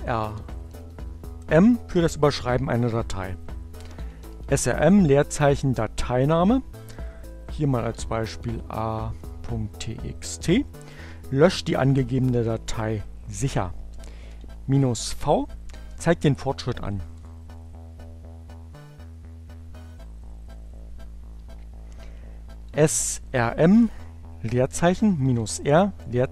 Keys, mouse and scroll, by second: 0.0-1.2 typing, 3.1-4.1 typing, 7.8-9.2 typing, 13.4-14.3 typing, 16.0 Return, 20.8-21.7 typing, 23.0-24.3 typing, 26.0 space.